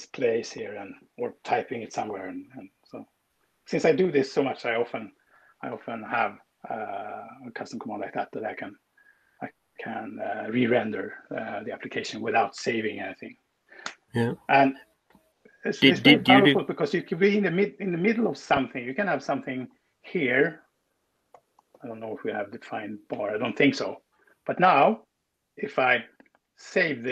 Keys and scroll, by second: 21.1-22.1 typing, 23.1 Escape.